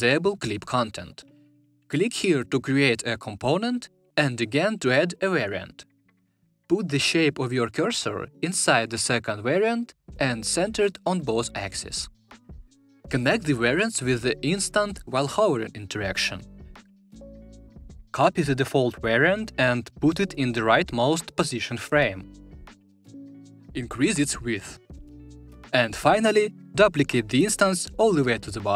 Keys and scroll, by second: 18.5 super+c, 22.9 super+v, 27.8 super+d.